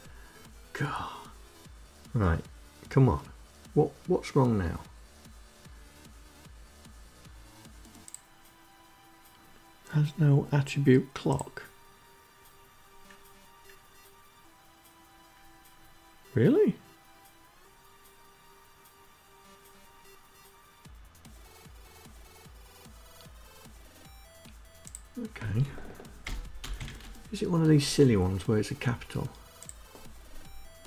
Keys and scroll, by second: 24.2 BackSpace, 24.8 shift+c.